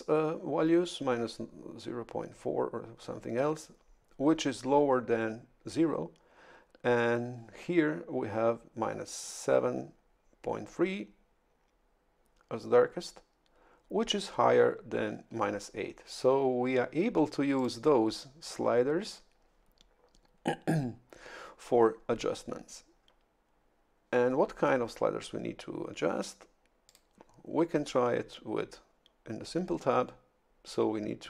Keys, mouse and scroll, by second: 17.6 click, 26.9 click.